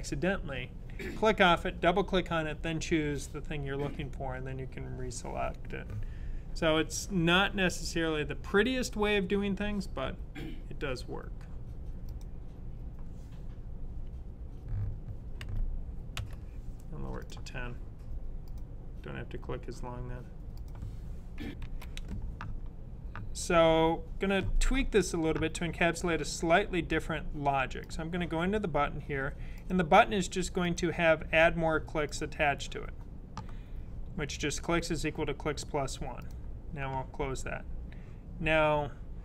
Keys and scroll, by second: 15.3-16.0 typing.